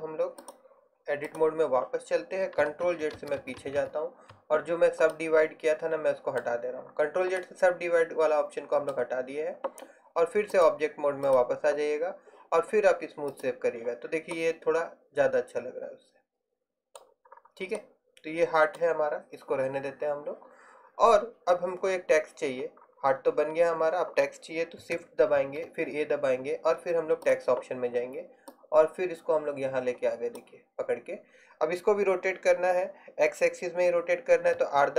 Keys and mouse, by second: 3.0 ctrl+z, 3.3 ctrl+z, 3.5 ctrl+z, 3.7 ctrl+z, 3.9 ctrl+z, 5.2-6.3 middle drag, 11.4-12.5 drag, 13.4-14.6 drag, 14.6 middle click, 17.4-25.5 drag, 25.5 shift+a, 28.6 click, 28.9 click, 29.4 click, 34.6 r.